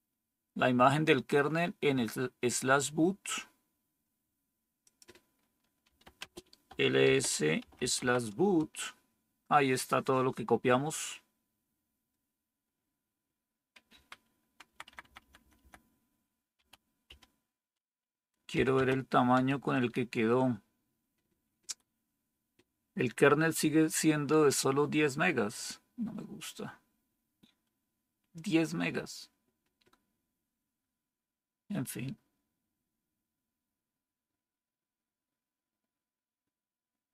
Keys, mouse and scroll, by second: 5.5-8.2 typing, 8.4 Return, 13.8 Up, 14.6 Left, 14.8 Left, 15.0 Left, 15.1 Left, 15.3 Left, 15.5 Left, 16.5-17.0 typing, 18.4-19.8 typing.